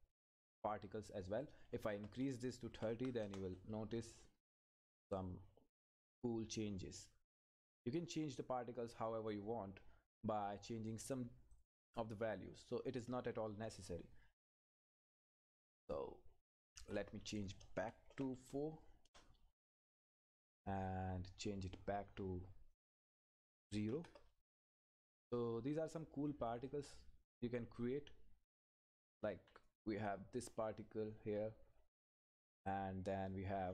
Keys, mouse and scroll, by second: 3.2 Return, 8.6-9.0 scroll down 1, 10.9 scroll up 1, 11.5 click, 19.0 Return, 22.7 click, 23.6 Left, 24.5 Return, 25.4 click, 26.0-26.5 scroll down 1, 26.5 click, 26.7 Up, 32.1-32.6 scroll down 1, 32.7 click, 33.1 Left.